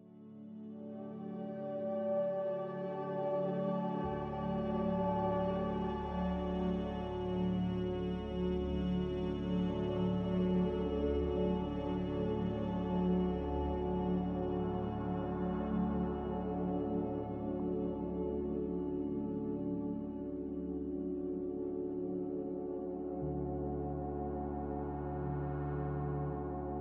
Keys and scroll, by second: 4.2 a, 8.5 ctrl+c, 8.8 ctrl+v, 12.0 ctrl+g, 22.6 x, 24.2-25.2 typing.